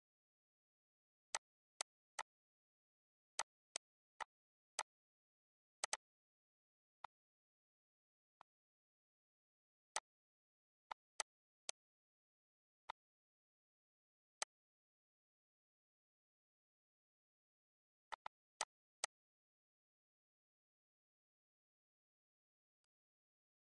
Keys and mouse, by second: 1.3 click, 1.7 click, 3.3 click, 4.0 click, 4.2 click, 4.7 click, 5.8 click, 6.3 ctrl+s, 7.0 click, 8.4 click, 9.1 click, 9.9 click, 10.8 click, 11.1 shift+click, 11.6 click, 12.5 click, 13.1 ctrl+s, 14.3 click, 15.9 click, 17.7 click, 18.1 click, 19.4 click, 20.4 click, 21.3 click, 22.8 click.